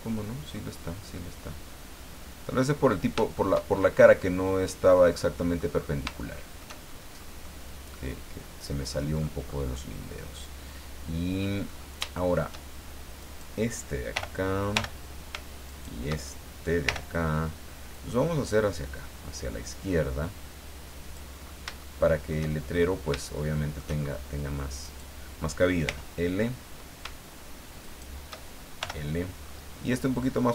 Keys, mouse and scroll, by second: 2.8-3.1 scroll up 1, 3.4 shift+middle click, 4.0-4.5 scroll up 2, 5.8 scroll up 2, 6.2 shift+middle click, 7.1 scroll down 2, 7.4-9.2 middle drag, 9.7-11.6 middle drag, 11.6-12.0 scroll up 2, 12.1 shift+middle click, 13.2 right click, 14.1 ;, 15.6 shift+right click, 16.8 l, 17.9-21.3 drag, 21.4 scroll down 1, 21.8 shift+middle click, 22.7-23.1 shift+scroll up 1, 23.4 shift+middle click, 24.8 click, 25.9 l, 27.8 shift+right click, 28.8 l, 29.4-29.7 scroll down 2.